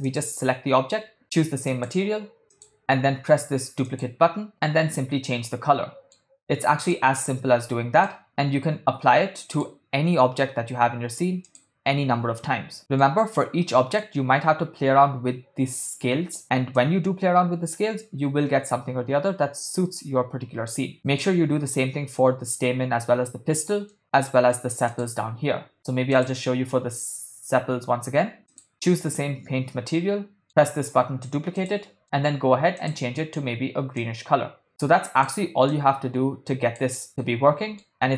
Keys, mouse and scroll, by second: 0.1 click, 2.0 click, 3.9 click, 4.7-6.3 middle drag, 6.8 click, 11.5 click, 12.8 shift+middle click, 13.6-14.1 middle drag, 15.7 middle click, 16.8-20.9 drag, 21.0 click, 24.0-24.6 middle drag, 25.0 click, 26.1-28.7 drag, 29.9 middle click, 31.6 click, 32.0 middle drag, 32.8 click, 37.1 middle click.